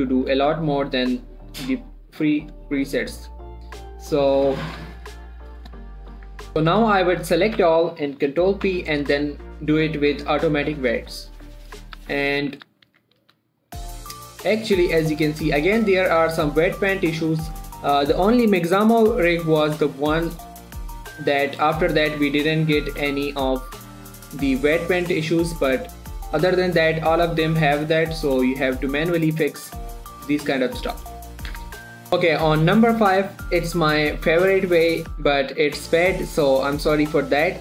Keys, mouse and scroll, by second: 0.6 g, 1.4 click, 2.0 g, 2.3 click, 2.9 shift+middle click, 3.6 click, 4.3 g, 4.9 click, 5.1 1, 5.4 scroll down 1, 5.7 shift+middle click, 6.3 z, 6.5-7.6 middle drag, 7.6 middle click, 7.9 a, 8.9 ctrl+p, 10.7 click, 12.3 z, 12.7 click, 13.0 z, 13.3 Tab, 13.7 1, 14.1 click, 14.3 r, 14.9 right click, 15.4 shift+middle click, 15.5-16.1 shift+scroll up 1, 16.1 click, 16.3 r, 17.0 right click, 17.7 click, 18.0 r, 18.3 right click, 20.0 shift+middle click, 20.2 shift+scroll up 1, 20.7 click, 20.9 r, 21.4 right click, 21.7 click, 22.0 r, 22.7 right click, 22.7 right click, 23.1 click, 23.3 r, 23.6 right click, 23.9 shift+middle click, 24.5 click, 24.9 r, 25.4 right click, 25.8 r, 26.1 right click, 27.6 click, 27.8 r, 28.0 right click, 28.4 click, 28.7 r, 29.3 right click, 29.7 click, 29.9 r, 31.2 right click, 32.0 Tab, 32.1 middle click.